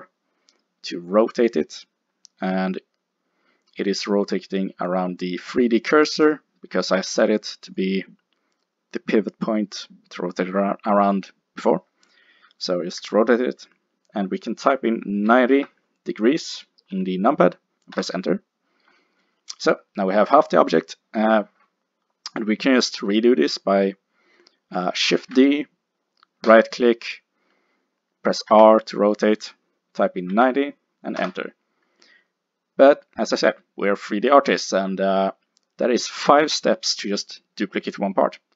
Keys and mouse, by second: 7.7 click, 13.0 r, 25.2 shift+d, 26.6-28.4 drag, 28.5 r, 33.0-35.3 middle drag.